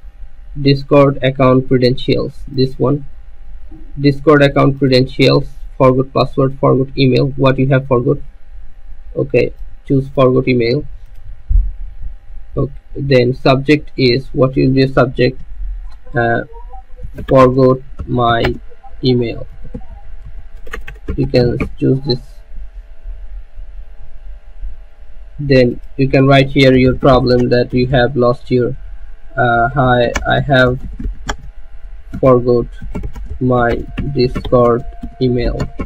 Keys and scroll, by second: 17.0-22.8 typing, 26.4-35.8 typing.